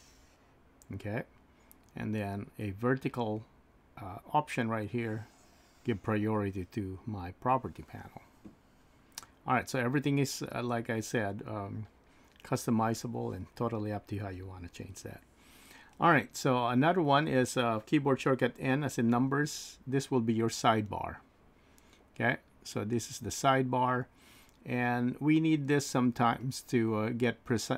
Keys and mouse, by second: 19.1 n.